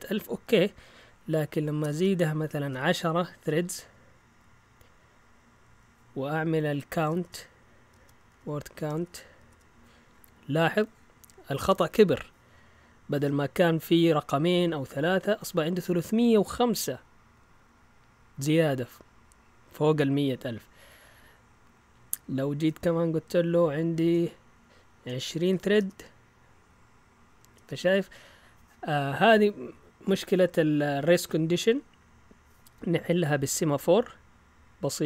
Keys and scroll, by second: 0.3 Up, 1.8-3.2 typing, 3.4 Return, 5.6 Up, 7.0-9.4 typing, 9.5 Return, 20.6 Up, 21.2 Left, 21.9 typing, 22.0 Left, 22.1 Left, 24.0-27.7 typing.